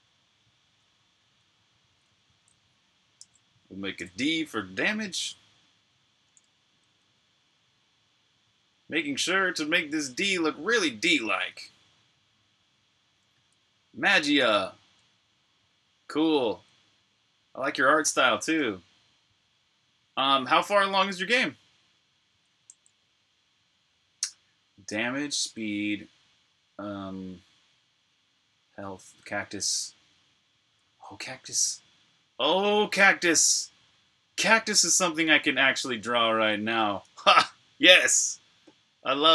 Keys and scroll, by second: 3.1 super+a, 3.8 BackSpace, 6.7-7.5 typing, 22.6 super+s, 37.1 super+Tab.